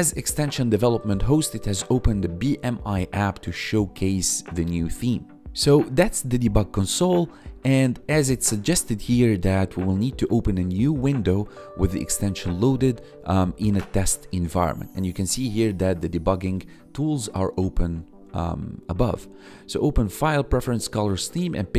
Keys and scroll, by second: 1.0 ctrl+1, 2.7 1, 15.5 1, 17.9 1.